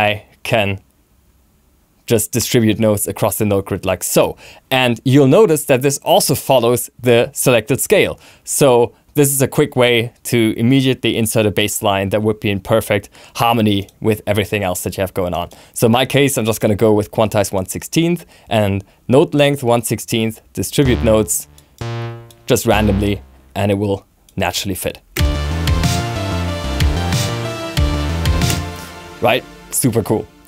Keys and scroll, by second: 25.0 alt+super+space, 28.4 space.